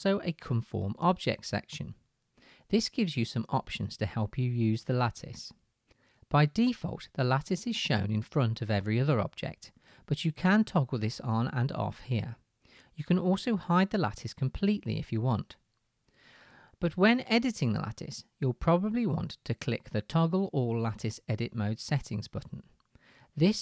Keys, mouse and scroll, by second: 10.2 click, 10.2 middle click, 11.1 middle click, 11.5 click, 11.7 middle click, 12.2-20.7 drag, 20.7-23.6 middle drag.